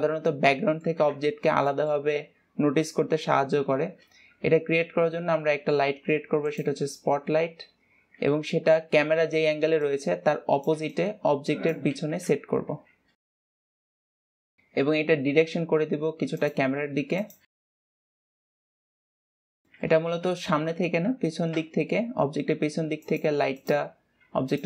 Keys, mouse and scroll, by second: 0.7-1.5 middle drag, 1.5 ctrl+s, 1.9 scroll down 1, 2.1-7.1 shift+middle drag, 7.1 shift+a, 7.3-7.7 scroll down 4, 13.2 g, 13.8 KP_1, 14.2 g, 18.3 g, 18.6 KP_7, 18.9 r, 22.0 KP_1, 23.0 r.